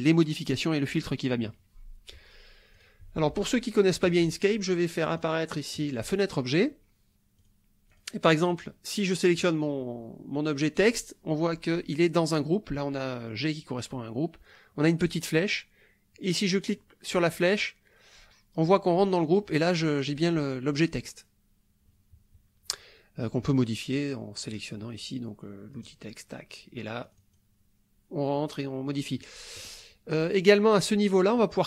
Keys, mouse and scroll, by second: 2.7 click, 4.0 click, 5.2 click, 5.8 click, 7.4 click, 7.9 click, 8.4 click, 9.3 click, 15.1 click, 16.6 click, 19.3 click, 25.8 click, 27.1 click.